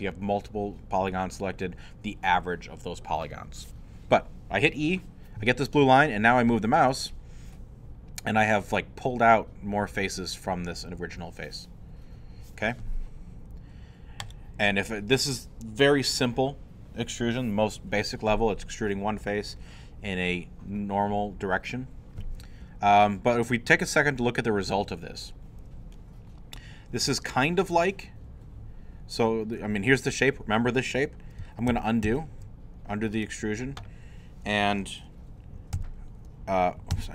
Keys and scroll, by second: 31.7 ctrl+z, 35.7 w, 36.9 w.